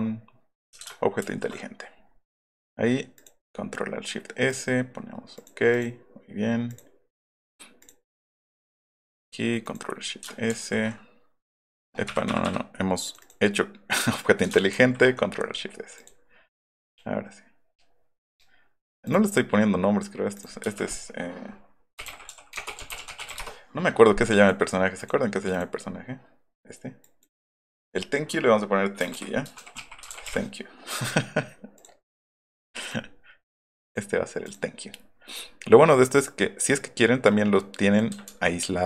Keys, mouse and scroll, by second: 1.2 ctrl+alt+shift+s, 3.1 click, 4.4 click, 5.3 click, 5.7 click, 6.6 click, 7.8 click, 8.0 click, 8.5 click, 8.8 click, 9.1 right click, 10.5 ctrl+alt+shift+s, 11.5 Insert, 13.0 click, 14.8 ctrl+alt+shift+s, 15.9 click, 16.8 click, 18.3 click, 19.0 click, 20.3 click, 20.6 F2, 21.7-23.7 typing, 24.4 click, 25.0 click, 25.5 click, 27.0 click, 27.3 click, 27.5 click, 28.9-30.6 typing, 31.7 click, 32.8 click, 33.8 click, 34.4 click, 36.0 click, 36.1 click, 37.2 click.